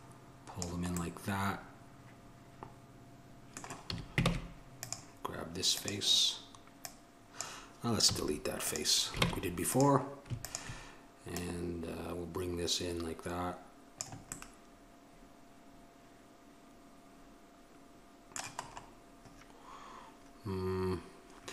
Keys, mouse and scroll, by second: 4.0 a, 4.5 ctrl+Tab, 9.4 ctrl+Tab, 10.6-14.2 drag, 14.5-16.1 middle drag.